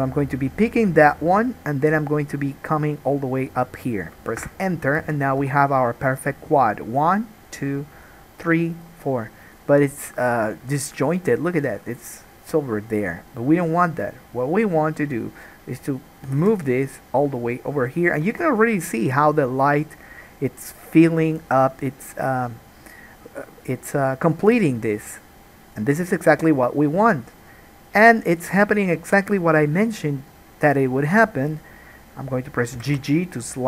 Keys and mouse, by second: 5.3 alt+a, 5.6 1, 6.2 click, 7.2-8.6 drag, 9.6-16.4 drag, 16.4 g, 18.4 alt+a, 18.6-28.0 middle drag, 28.0 click, 28.1 middle click, 29.4 ctrl+click, 32.9 g.